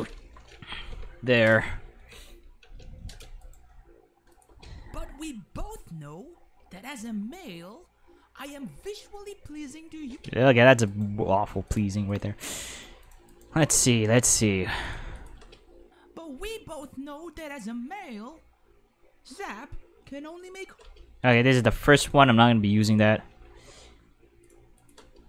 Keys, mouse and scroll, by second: 0.9 x, 1.3 right click, 2.1 space, 2.6 space, 3.4 right click, 3.7 g, 4.3 click, 4.5 space, 5.6 middle click, 10.0 space, 10.8 right click, 11.0 g, 11.7 click, 12.1 right click, 12.7 g, 13.0 click, 13.3 right click, 13.5 g, 14.8 click, 15.1 click, 15.3 space, 20.8 space, 21.3 x, 22.0 right click, 23.3 g, 24.4 click, 24.8 click, 25.0 space.